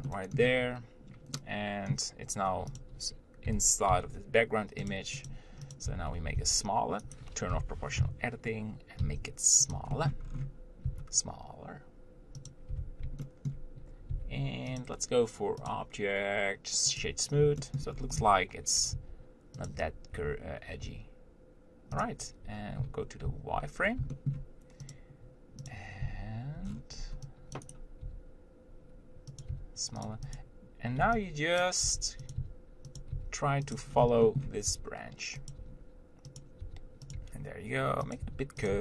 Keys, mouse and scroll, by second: 0.3-3.0 shift+middle drag, 3.0 click, 3.7 g, 5.5 click, 6.1 Tab, 6.6 s, 7.7 o, 8.2 KP_7, 9.3 s, 10.2 shift+middle click, 10.5 scroll up 1, 11.1 s, 13.0 Tab, 13.5 shift+middle click, 14.4 g, 17.3 click, 17.8 shift+middle click, 18.1 scroll up 3, 18.4 Tab, 19.2 s, 20.0 Tab, 20.4 Tab, 21.0 r, 23.9 z, 24.4 shift+middle click, 25.2 click, 25.9 click, 27.5 c, 29.5 g, 29.7 s, 30.6 click, 31.8 b, 32.1 g, 32.6 s, 33.4 g, 34.2-34.5 scroll down 1, 34.5 shift+middle click, 34.9 e, 35.9 g.